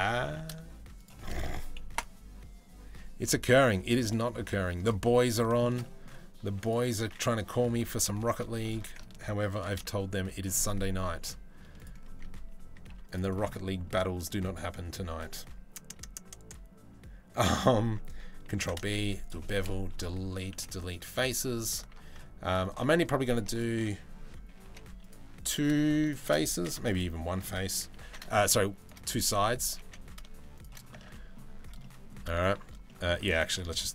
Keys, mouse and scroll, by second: 1.5 Delete, 4.6 middle click, 5.4 middle click, 9.2 ctrl+b, 10.8 Delete, 12.5 ctrl+r, 13.1 middle click, 13.9 middle click, 14.1 middle click, 18.1 ctrl+b, 19.5 \, 20.1 Delete, 21.5 ctrl+r, 22.5 middle click, 24.1 g, 27.6 ctrl+b, 29.1 g, 30.6 Tab, 30.7 middle click, 31.4 middle click, 32.4 middle click, 32.8 Tab, 33.6 middle click.